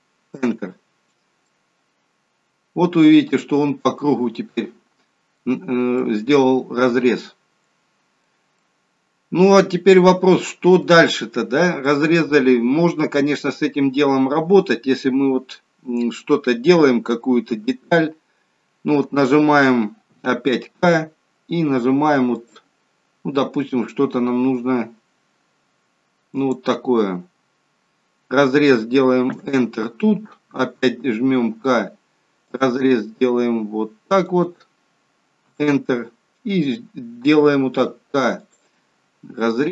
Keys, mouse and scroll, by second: 1.4 middle click, 6.0 middle click, 8.6 middle click, 11.9 middle click, 17.6 KP_1, 20.7 k, 31.2 k, 37.7 k.